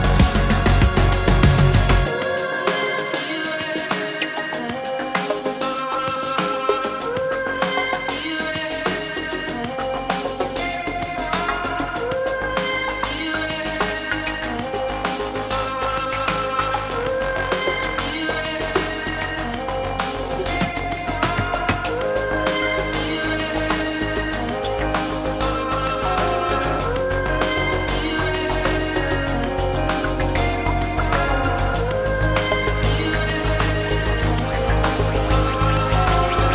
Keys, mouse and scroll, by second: 9.8 ctrl+d, 25.8 ctrl+g, 31.7 Delete, 32.9 ctrl+d.